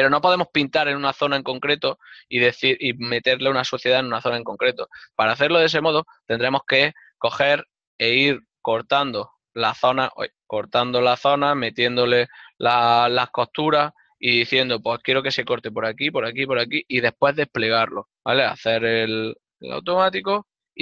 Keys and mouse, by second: 7.9 ctrl+Tab, 8.3 click, 9.5 ctrl+Tab, 9.5 click, 10.1 ctrl+Tab, 10.8 ctrl+middle click, 12.3 alt+right click, 14.3 ctrl+e, 18.2 a.